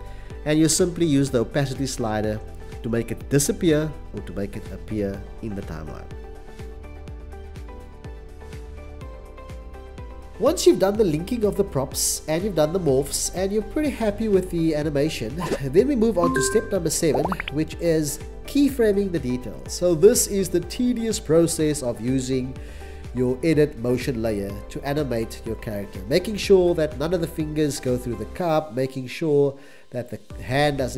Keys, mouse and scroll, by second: 15.7 c, 19.7 c, 20.8 x, 22.6 click.